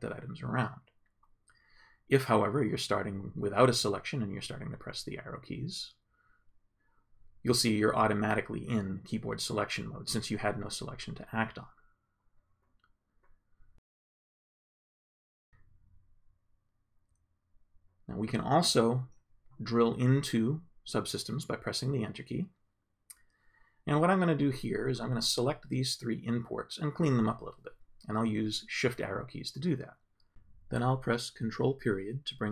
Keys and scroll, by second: 0.2 Down, 6.2 Up, 6.7 Left, 7.8 Right, 16.1 Left, 20.0 Return, 21.9 Up, 25.6 shift+Down, 28.0 shift+Left, 28.4 shift+Up, 31.4 ctrl+..